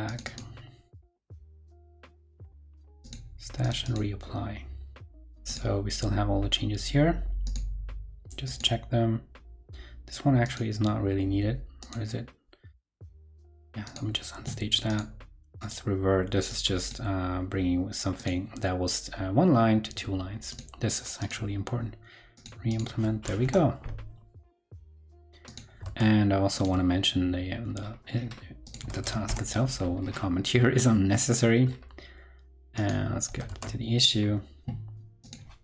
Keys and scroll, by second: 23.4 super+Return, 25.8 super+Tab, 26.8 super+Tab, 28.9 super+a, 33.2 super+c, 33.4 super+Tab, 33.6 super+c, 33.6 super+Tab.